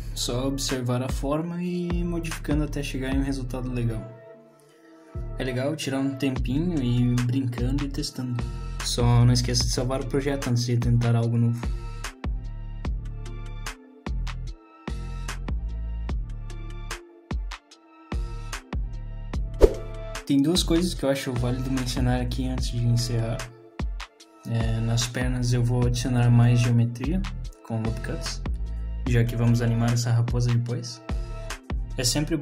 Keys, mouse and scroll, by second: 0.1 scroll down 2, 0.1 middle click, 0.6 click, 0.7 middle click, 0.8-1.2 scroll up 3, 1.2 click, 1.6 click, 1.7 click, 2.2 middle click, 2.9 click, 3.3 g, 3.6 middle click, 3.9 click, 4.2 shift+click, 4.4 click, 4.6 g, 5.1 middle click, 5.4 click, 5.6 shift+click, 5.7 middle click, 6.1 click, 6.5 click, 6.9 click, 6.9 middle click, 7.1 click, 7.3 shift+click, 7.7 middle click, 8.0 g, 8.6 alt+click, 8.9 g, 9.8 s, 10.2 middle click, 10.3 scroll down 1, 10.6 middle click, 10.9 click, 11.0 middle click, 11.3 click, 11.9 middle click, 12.3 KP_3, 13.0 alt+click, 13.7 z, 14.4 s, 15.7 g, 17.2 z, 17.6 click, 17.7 scroll down 2, 18.1 click, 18.1 middle click, 18.4 shift+click, 18.7 shift+click, 18.9 click, 19.8 shift+middle click, 19.8 scroll down 5, 21.7 scroll down 1, 25.6-26.1 scroll up 2, 26.1 middle click, 26.4 middle click.